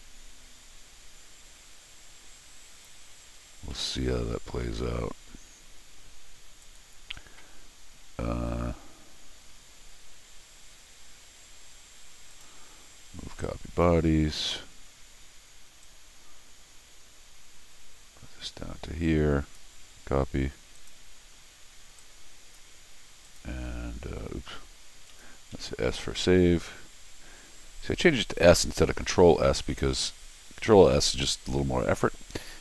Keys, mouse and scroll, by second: 3.5 scroll down 1, 3.7 middle click, 12.3 click, 13.4 click, 15.8-19.5 drag, 20.8 click, 22.0 click, 23.2 click, 25.1 click, 25.5 s.